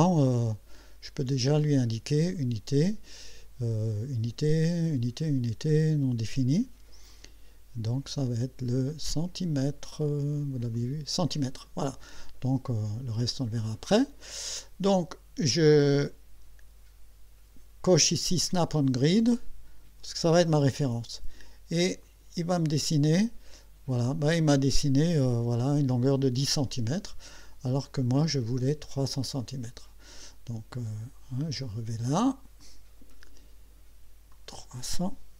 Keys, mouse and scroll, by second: 0.5 click, 2.3 click, 7.1 click, 10.7 click, 13.6 click, 18.6 click, 22.0 click, 29.4 click, 32.6 click, 34.3 click.